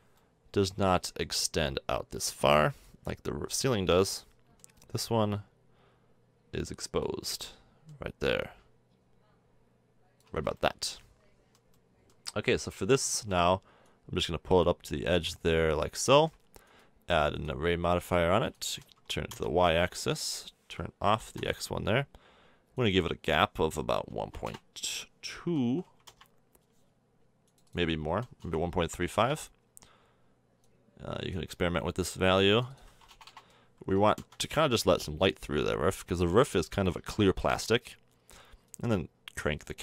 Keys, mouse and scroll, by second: 3.5-6.1 middle drag, 6.1 click, 6.7 middle click, 7.2-10.3 middle drag, 10.3 a, 10.4 Tab, 10.6-11.2 middle drag, 13.2 middle drag, 16.1 middle click, 24.2 BackSpace, 33.3 BackSpace, 38.7-39.8 drag.